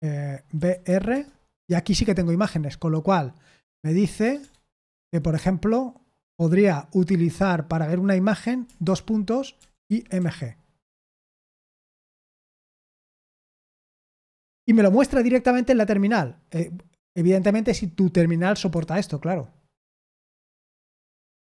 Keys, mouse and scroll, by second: 0.3-1.3 typing, 2.3 j, 3.6 j, 4.3 BackSpace, 4.9 Down, 8.8-10.6 typing, 12.6 Return, 18.7 Escape, 19.7 q, 20.8 Escape.